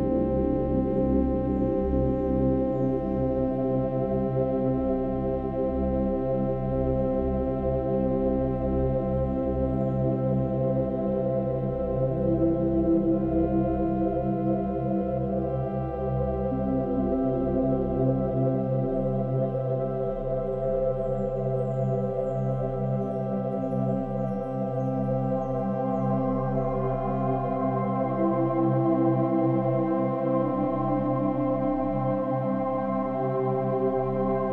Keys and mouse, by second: 1.1-2.4 ctrl+alt+drag, 2.1 ctrl+s, 3.7 1, 4.5-6.4 ctrl+alt+drag, 6.4 ctrl+s, 7.2-8.3 drag, 8.3 right click, 8.4-18.8 drag, 18.7 Delete, 18.8 Delete, 19.4 Delete, 20.0-21.4 Delete, 21.7-24.0 typing, 27.3-33.2 drag.